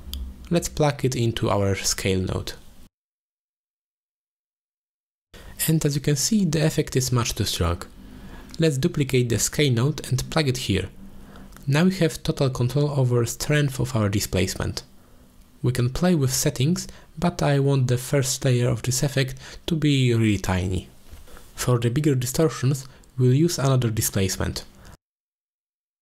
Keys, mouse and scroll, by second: 1.1-2.9 drag, 3.7-7.0 drag, 7.7 click, 8.3 click, 9.0 shift+d, 11.9-15.9 drag, 17.2 middle drag, 17.8 middle click, 19.7-21.8 drag, 19.7 4, 22.0 middle drag, 23.0-23.5 middle drag, 23.5-23.9 drag, 24.3-25.9 drag.